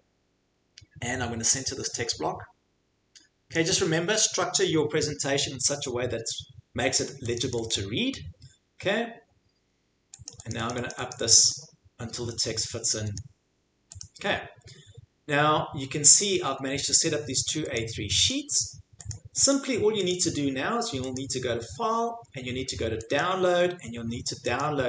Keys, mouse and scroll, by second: 3.5 click, 7.3 click, 7.5 click, 7.7 click, 10.3 click, 10.5 click, 10.7 click, 10.9 click, 11.1 click, 11.3 click, 11.5 click, 13.2 click, 14.0 click, 16.1 click, 16.9 click, 17.8 click, 18.3 click, 19.1 click, 19.5 click, 20.1 click, 21.1 click, 23.1 click, 24.6 click.